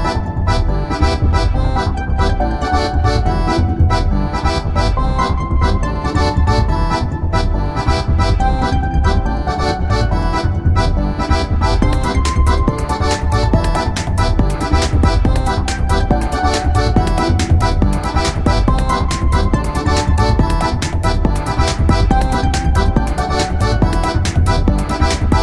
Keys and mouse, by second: 5.1-6.5 middle drag, 6.5-8.4 drag, 8.0 z, 8.9 z, 9.6-13.8 middle drag, 10.9 z, 11.4 z, 12.0 z, 14.8 middle click, 16.0-17.8 middle drag, 19.1-20.7 middle drag, 20.7 ctrl+a, 22.8 ctrl+a.